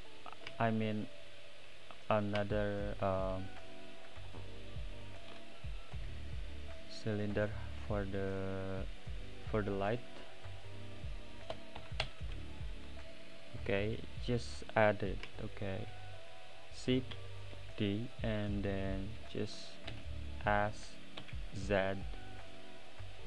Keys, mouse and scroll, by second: 5.9 n, 10.4 click, 12.0-13.6 drag, 13.6-17.1 middle drag, 17.1 shift+d, 19.9 s.